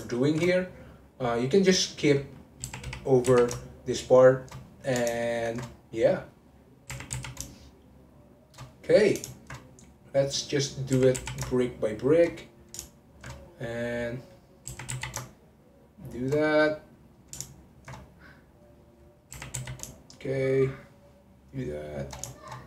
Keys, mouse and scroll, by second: 0.1 alt+shift+click, 0.6 click, 1.4-2.6 middle drag, 2.6 r, 4.6 middle click, 5.4 alt+shift+click, 5.7 click, 6.3 middle click, 6.9 r, 8.7 middle click, 9.4 alt+shift+click, 9.7 click, 10.3 middle click, 10.9 r, 12.4 middle click, 13.1 alt+shift+click, 13.4 click, 14.1 middle click, 14.7 r, 16.4-17.6 middle drag, 17.6 alt+shift+click, 18.2 click, 18.8 middle click, 19.3 r, 22.3-22.6 shift+middle drag.